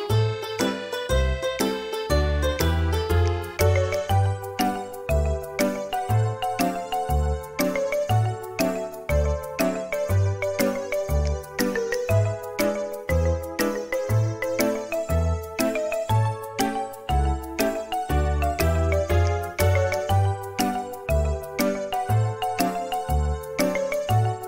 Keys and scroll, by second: 4.5 space, 5.1 m, 6.9 typing, 10.8 space, 21.4 space.